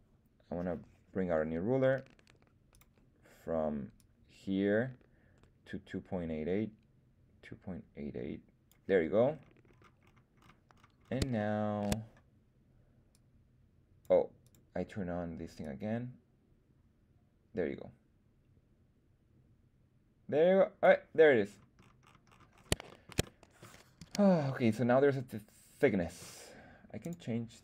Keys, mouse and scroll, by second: 2.6 click, 3.9-8.6 drag, 9.2-10.3 scroll down 6, 10.3-11.2 scroll up 4, 11.3 shift+middle click, 13.0-14.1 drag, 14.4 click, 15.5-20.8 drag, 21.4-22.6 scroll down 9, 22.8 shift+middle click, 23.2-23.5 middle drag, 23.9 z, 24.4-26.1 middle drag, 26.9-27.6 drag.